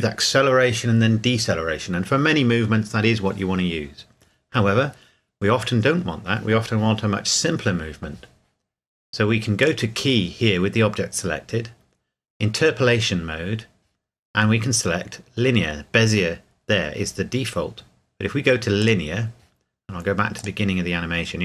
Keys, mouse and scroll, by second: 9.6 click, 18.8 click.